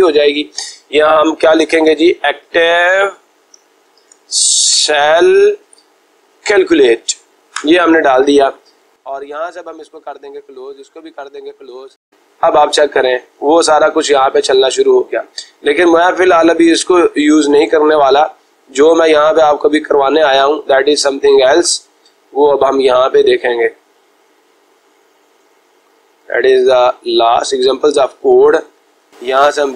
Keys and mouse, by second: 29.0 click.